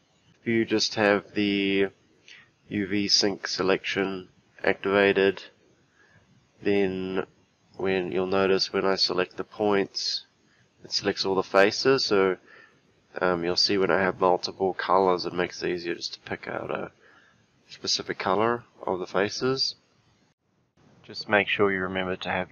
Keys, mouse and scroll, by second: 7.7 click, 9.3 click, 20.5 g, 21.6 g, 21.7 click.